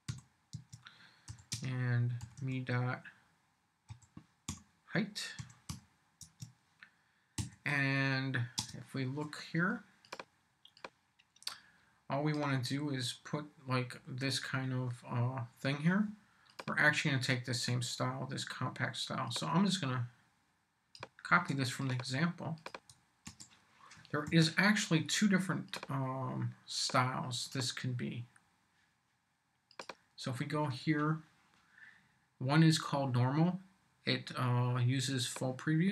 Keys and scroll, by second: 0.0-0.1 typing, 0.5 Tab, 1.3-5.7 typing, 6.2 Tab, 7.4 ,, 8.6 space, 21.3 super+c, 23.3 super+v, 23.9 shift+super+v, 24.3 shift+super+0.